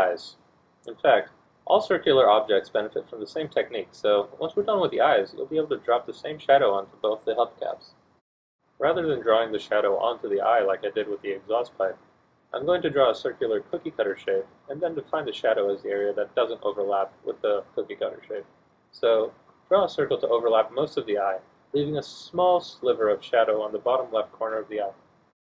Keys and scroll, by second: 14.5 e, 16.5 1, 16.7 F1.